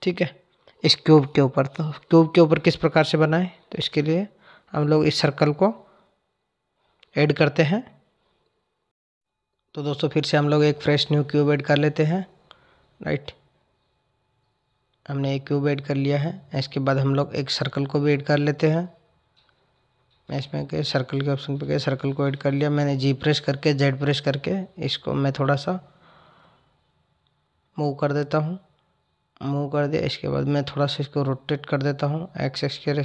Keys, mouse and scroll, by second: 9.8 shift+a, 14.0 shift+a, 15.0 click, 18.1 shift+a, 20.0 shift+a, 20.1 shift+a, 22.1 click, 24.5 click, 26.5 g, 30.0 r.